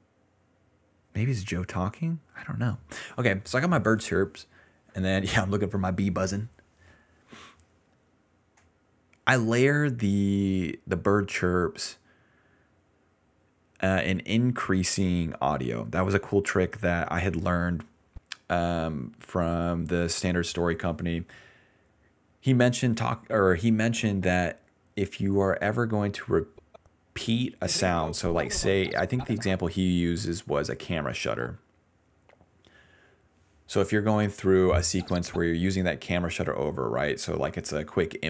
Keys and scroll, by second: 1.7-3.3 typing, 14.3 s, 14.8 s, 15.0 s, 15.4 ctrl+z, 16.8 d, 17.0 d, 17.5 s, 27.4 ctrl+s, 27.6 space, 29.0-32.0 typing, 34.9 space, 35.3 space, 35.6 s.